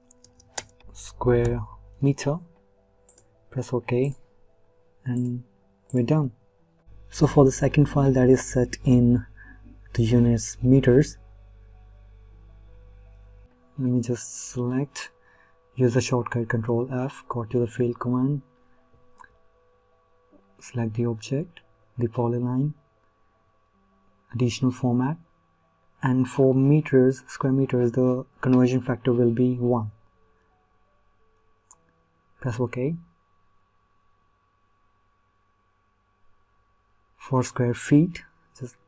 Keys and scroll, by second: 17.1 ctrl+f, 38.7 ctrl+f.